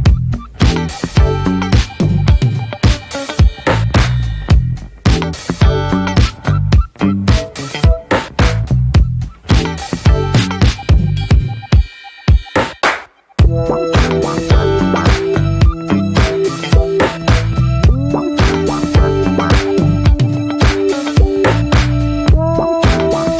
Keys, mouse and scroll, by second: 1.1 click, 1.5-1.9 scroll down 2, 2.2 scroll down 9, 2.4 shift+middle click, 2.5 scroll up 1, 2.8 Tab, 2.9-3.2 scroll down 3, 3.2 click, 3.8 click, 4.2 ctrl+a, 4.4-4.7 scroll up 2, 4.7 ctrl+j, 7.4 scroll up 1, 7.5 Tab, 7.7 click, 8.9 `, 9.3 scroll down 1, 9.5 /, 9.9 middle click, 10.1 Tab, 10.5 middle click, 10.8 ctrl+r, 11.7 ctrl+r, 12.8-13.5 middle drag, 13.5 ctrl+r, 14.5-14.8 scroll down 3, 14.8-16.3 middle drag, 16.3 scroll up 1, 16.6 middle drag, 16.8 scroll up 1, 17.3 ctrl+r, 18.1-18.5 scroll down 2, 18.5-18.8 middle drag, 18.8 Tab, 18.9 drag, 19.1 middle drag, 19.4 ctrl+s, 19.9 /, 20.5 click, 20.7 scroll down 2, 20.9-21.4 shift+middle drag, 21.4 shift+click, 23.2 Tab.